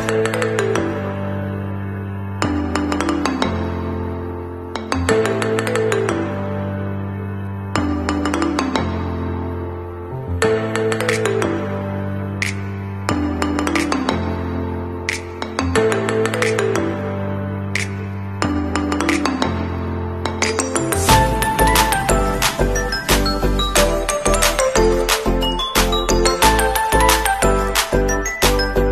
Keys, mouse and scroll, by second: 7.6 alt+scroll down 1, 9.1 scroll down 1, 13.5-14.0 alt+scroll down 1, 14.0-15.9 alt+scroll up 1, 16.1 scroll up 1.